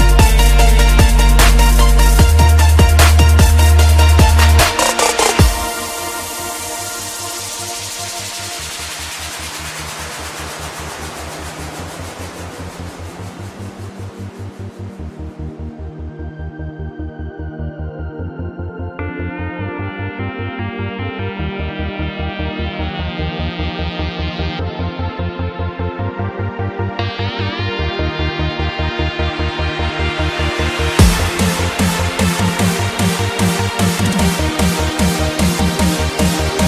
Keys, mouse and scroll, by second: 0.0-0.2 typing, 1.0 click, 1.8 Tab, 2.3 click, 4.5-6.0 typing, 6.7 click, 9.5-11.0 typing, 11.2 Return, 12.0 click, 14.2 right click, 14.6 F10, 15.2-16.5 drag, 15.7-17.3 typing, 18.1-19.9 drag, 20.5-22.2 typing, 22.6 click, 26.4 Tab, 26.4 F10, 26.5 right click, 27.2 click, 27.8-29.3 typing, 30.0 click, 32.4 shift+0, 32.9 Return, 33.8-35.8 drag, 35.8 right click.